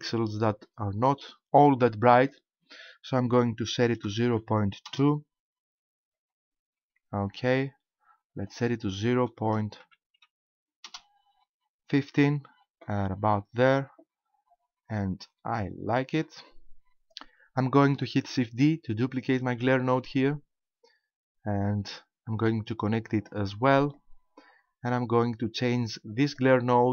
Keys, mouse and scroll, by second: 2.2 click, 8.5 click, 16.4 click, 19.4 shift+d, 23.3 click, 24.0 click.